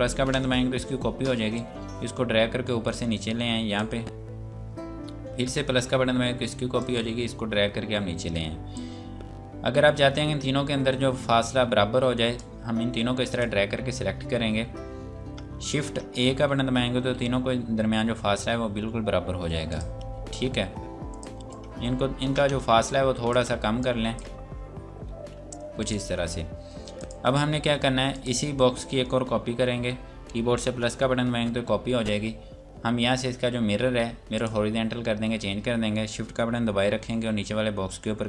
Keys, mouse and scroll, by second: 0.3 KP_Add, 1.5 click, 5.4 KP_Add, 6.8 click, 12.4 click, 16.6 shift+a, 19.7 click, 23.8 click, 25.1 a, 25.8 click, 31.1 KP_Add, 34.3 click.